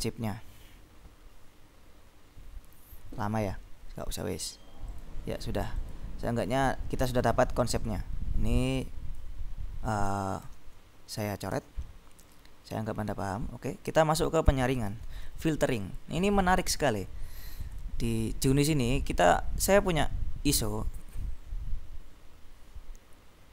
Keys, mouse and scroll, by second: 3.0 scroll down 2, 3.3-4.3 scroll up 3, 5.0 click, 5.9 click, 8.1-9.7 drag, 10.5 ctrl+b, 11.6 s, 12.3 click, 15.0 ctrl+b, 15.9 click, 17.9 click, 19.0-19.5 scroll down 2, 19.9 click, 20.6-21.6 drag, 22.3 click.